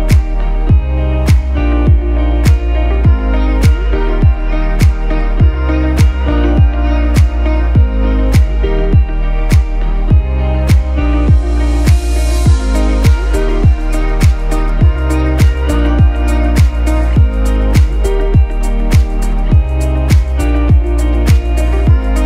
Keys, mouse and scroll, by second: 1.7 shift+click, 4.0 z, 4.5 ctrl+z, 5.6 click, 9.3 shift+click, 13.3 ctrl+z, 14.0 click, 16.6 shift+click, 19.5 ctrl+z, 20.1 click, 20.8 ctrl+z, 21.5 z, 21.7 click, 22.0 space.